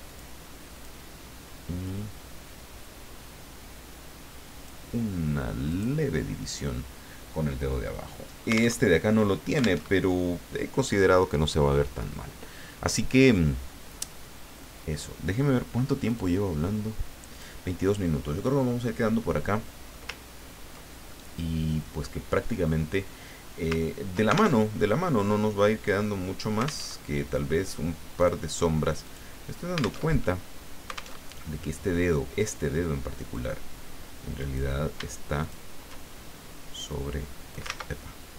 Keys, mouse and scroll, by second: 0.1 click, 0.7 click, 1.8-5.2 drag, 5.7 click, 7.9 click, 8.8 alt+Tab, 9.8 alt+Tab, 14.6 click, 16.1 click, 17.3 click, 19.3 click, 20.2-21.1 ctrl+scroll down 4, 21.1 ctrl+click, 23.8 ctrl+scroll up 2, 24.5 ctrl+alt+Tab, 26.8 alt+Tab, 28.2 click, 28.9 click, 30.0 alt+Tab, 31.1 alt+Tab, 33.3-34.7 drag, 35.4 shift+click, 36.9 click, 37.7 ctrl+z.